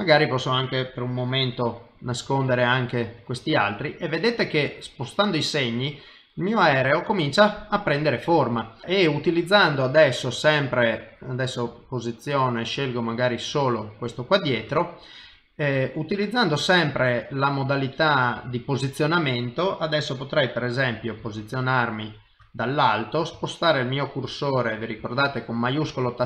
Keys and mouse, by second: 0.0 click, 2.5 click, 3.4 click, 3.4 middle click, 8.8 middle click, 11.0 click, 11.7 click, 12.3 click, 13.2 middle click, 15.5 middle click, 17.7 middle click, 18.6 middle click, 21.2 KP_7, 24.3 shift+right click, 26.1 middle click.